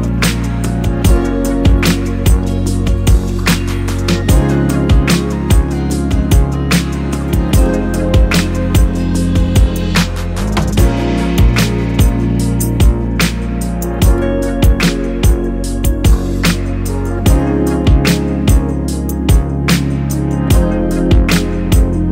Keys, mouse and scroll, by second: 0.4 KP_0, 1.6 right click, 3.4-5.2 middle drag, 3.4 KP_0, 5.2 click, 6.2 z, 8.3 click, 10.6 scroll up 1, 11.3 click, 12.5-15.4 drag, 14.1-17.0 middle drag, 15.2 KP_0, 15.8-17.0 scroll up 1, 17.0 click, 18.0 Tab, 18.1 click, 18.2 Tab, 18.5 click, 19.3 g, 20.2 click, 20.5 g, 21.1 click, 21.4 g, 21.6 click, 21.7 ctrl+z, 21.8 click, 21.9 click.